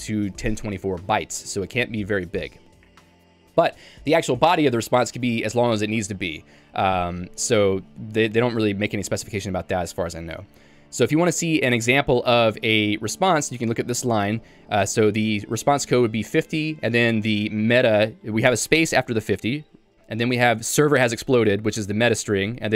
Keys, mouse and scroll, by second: 9.4 Escape, 10.4 h, 10.6 h, 13.4 k, 13.8 j.